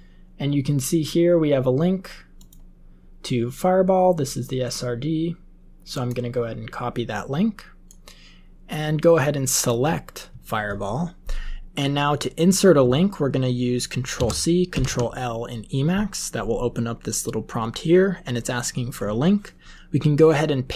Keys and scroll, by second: 14.1 ctrl+c, 14.7 ctrl+l.